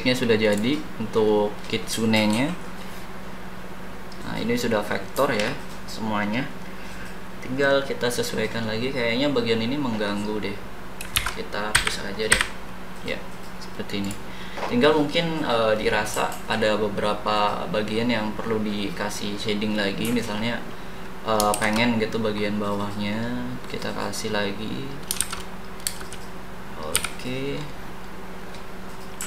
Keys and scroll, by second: 11.1 ctrl+z, 11.7 Delete, 21.5 shift+b, 25.2 shift+s, 25.8 space, 26.9 d.